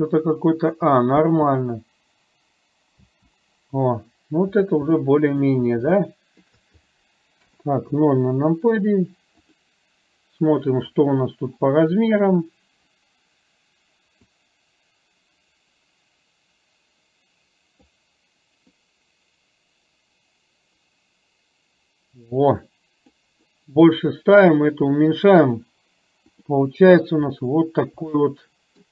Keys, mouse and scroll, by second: 1.4 space, 3.3 space, 4.4-4.9 scroll down 1, 5.1-5.4 middle drag, 6.1-6.6 shift+middle drag, 7.4 KP_0, 14.4-18.2 drag, 19.1-23.2 drag, 26.4 click, 27.4 scroll up 1, 28.6-28.9 shift+middle drag.